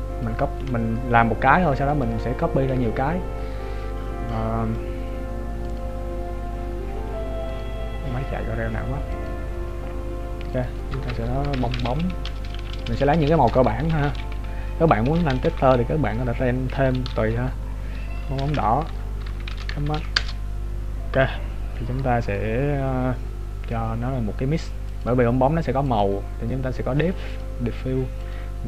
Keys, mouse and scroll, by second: 2.2 right click, 4.5 middle click, 5.8 click, 12.4-14.1 BackSpace, 18.7 BackSpace, 22.2 click, 26.1 click.